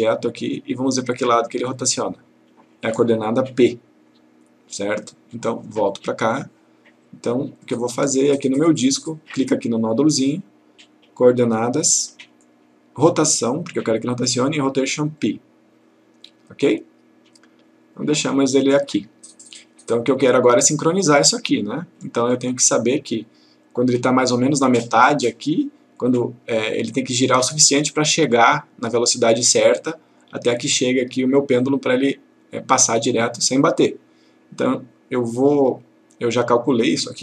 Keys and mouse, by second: 6.0 click, 7.7-8.3 click, 9.9 click, 15.3 click, 36.7-37.2 click.